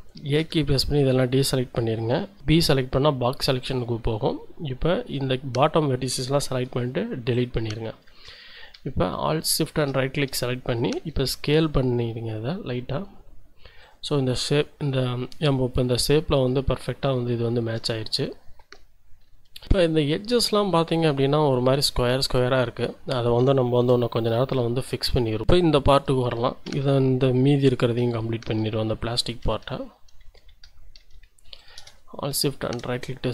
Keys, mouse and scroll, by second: 0.4 a, 3.6-6.5 drag, 6.5 Delete, 9.5 alt+shift+click, 11.1 s, 13.8 click, 17.1-18.2 shift+drag, 18.6 a, 19.3 z, 19.7-20.7 shift+drag, 21.0-23.0 drag, 23.8 1, 24.6 shift+click, 25.1-26.0 shift+scroll up 4, 25.4 Tab, 25.7 click, 26.7 Tab, 27.2 shift+right click, 28.9-31.0 typing, 31.6 alt+shift+scroll up 1, 32.0 alt+shift+click, 32.8 scroll up 2, 32.9 shift+click.